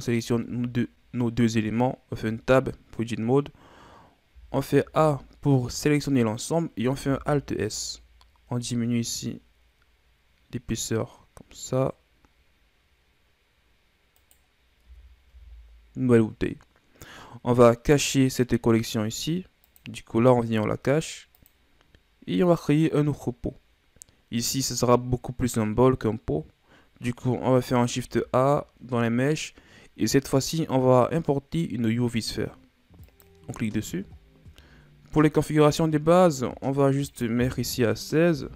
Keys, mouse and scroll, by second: 0.0 shift+right click, 2.2 Tab, 4.3 a, 4.8 a, 7.1 alt+s, 14.9 Tab, 15.3 a, 18.0 scroll down 4, 19.7 click, 21.4 click, 22.5 click, 28.0 shift+a, 34.2 scroll down 5, 35.1-37.1 scroll up 1, 37.1-38.5 drag.